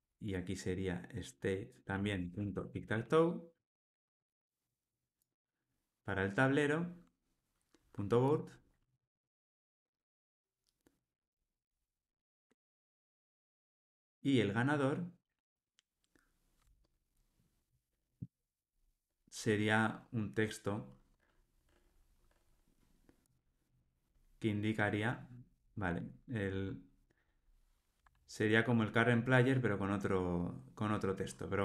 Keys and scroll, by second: 3.6 Return, 9.6 Return.